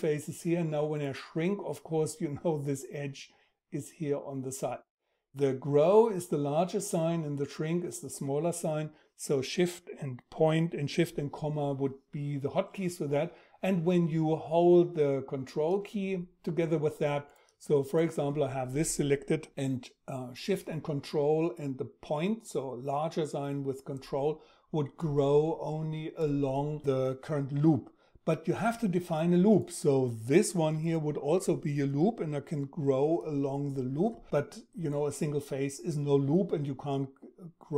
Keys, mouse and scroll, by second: 16.3 ctrl+shift+..